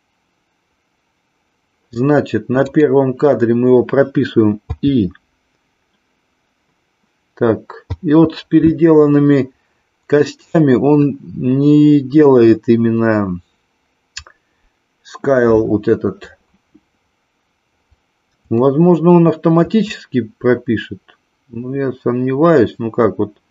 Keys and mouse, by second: 2.6 click, 18.6-19.8 shift+middle drag.